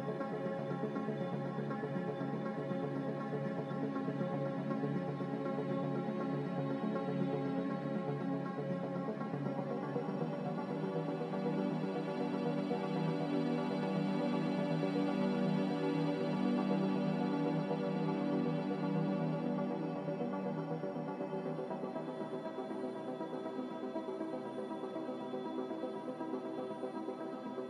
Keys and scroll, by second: 0.0-0.6 typing, 16.5 x, 19.2-20.0 typing, 21.2-22.0 typing, 23.8-25.2 typing.